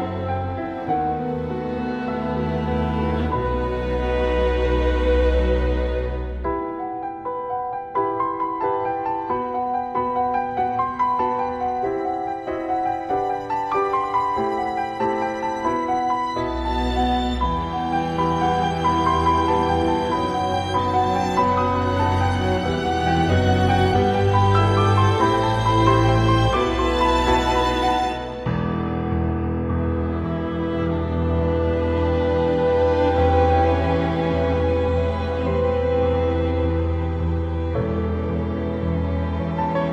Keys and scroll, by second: 3.4 ctrl+z, 3.6 ctrl+z, 4.6 ctrl+z, 9.7 ctrl+z, 10.0 ctrl+z, 10.2 ctrl+z, 11.0 ctrl+z, 11.2 ctrl+z, 11.4 ctrl+z, 15.0 ctrl+z, 15.3 ctrl+z, 17.3 ctrl+z, 20.2 ctrl+z, 21.6 ctrl+z, 23.2 ctrl+z, 29.7 ctrl+z, 30.9 ctrl+z, 31.7 ctrl+s, 35.3 ctrl+z, 36.2 ctrl+z, 37.5 ctrl+z, 38.7 ctrl+z.